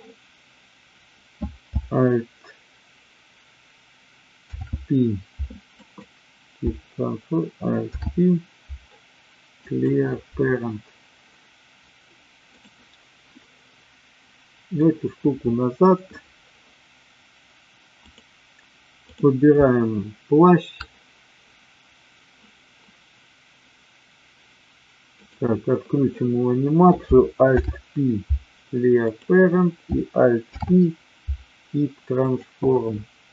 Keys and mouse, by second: 4.4 alt+p, 7.7 alt+p, 12.5 click, 13.8-14.8 drag, 18.0 click, 18.9 click, 25.2 click, 27.4 alt+p, 30.4 alt+p.